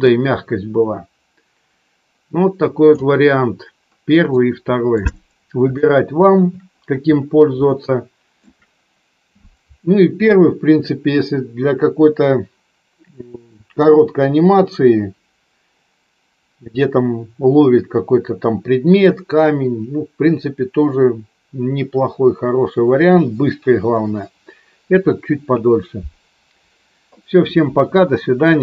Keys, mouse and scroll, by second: 4.3 middle click, 5.7 shift+middle click, 7.7 shift+middle click.